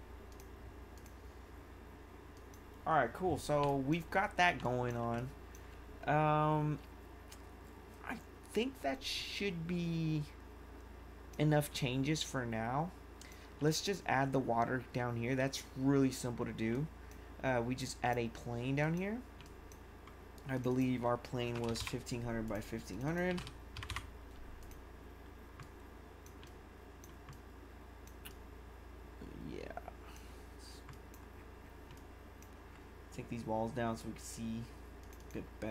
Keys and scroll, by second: 3.6 1, 19.5 1, 21.2-24.2 typing, 26.3 1.